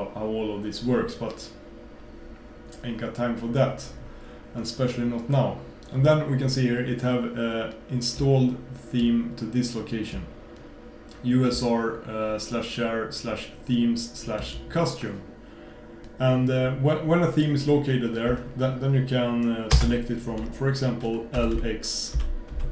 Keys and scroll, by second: 19.8 super+space.